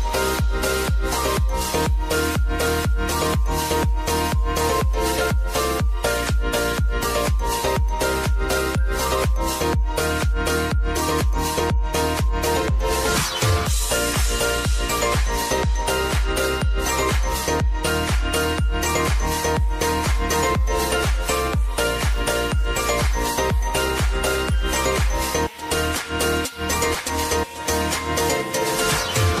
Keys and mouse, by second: 10.8 ctrl+alt+Home, 12.5-19.6 drag, 19.0 s, 19.6-21.4 drag, 21.4 r, 22.3-25.3 drag, 25.3 Return, 26.2 click.